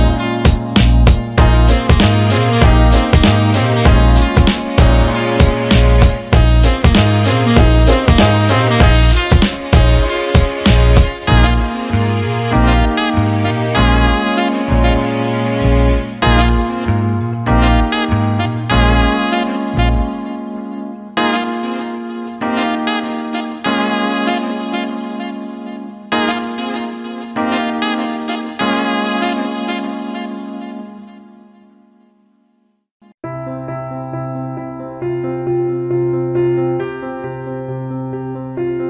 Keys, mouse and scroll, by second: 1.5-5.0 drag, 5.7-7.8 drag, 8.7-11.6 drag, 12.1-15.9 drag, 17.4-18.1 alt+middle drag, 18.5-19.8 drag, 20.3-20.9 alt+middle drag, 23.0 alt+middle click, 24.2-25.8 drag, 25.9-27.0 alt+middle drag, 28.2 click, 28.4-29.9 drag, 31.0 alt+shift+middle click, 31.3 alt+middle click, 31.5 alt+shift+middle click, 31.8 alt+middle click, 33.5 alt+middle click, 37.5 click, 38.3 alt+shift+middle drag.